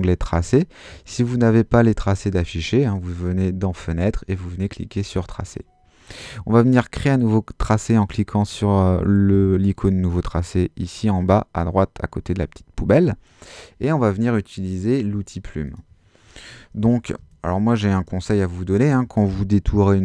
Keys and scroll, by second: 17.2 space.